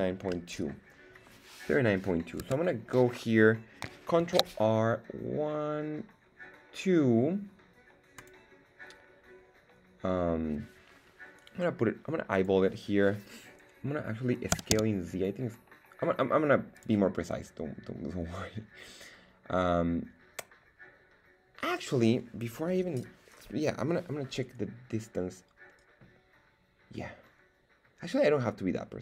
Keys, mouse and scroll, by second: 2.4 Tab, 4.2 ctrl+r, 12.3 click, 14.5 s, 14.7 z, 16.7 click.